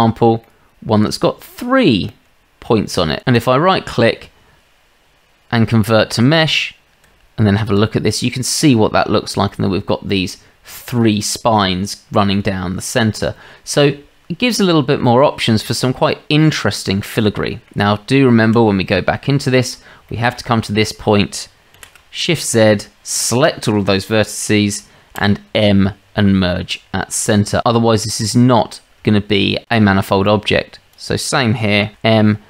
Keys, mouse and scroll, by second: 0.4-1.0 middle drag, 1.0-1.3 drag, 1.3 middle click, 2.1-3.1 middle drag, 3.2 Tab, 3.4-5.1 middle drag, 7.1 Tab, 8.2-9.0 middle drag, 14.6 Tab, 15.0-15.5 middle drag, 15.8-16.1 shift+middle drag, 16.4 middle drag, 17.9 Tab, 18.9-19.2 shift+middle drag, 20.1 shift+middle drag, 21.8 shift+z, 25.2 m, 27.7-28.1 shift+middle drag, 29.1-29.4 shift+middle drag, 30.3-30.9 drag, 31.9 m.